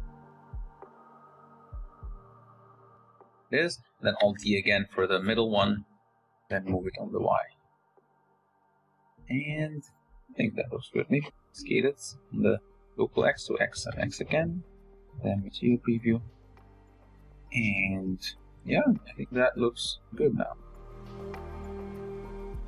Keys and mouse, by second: 1.3 z, 1.9 r, 3.4 alt+d, 4.1 r, 5.0 r, 5.1 r, 5.5 g, 7.0-9.8 typing, 10.9 s, 13.8 g, 14.4 z, 18.2-18.5 shift+drag.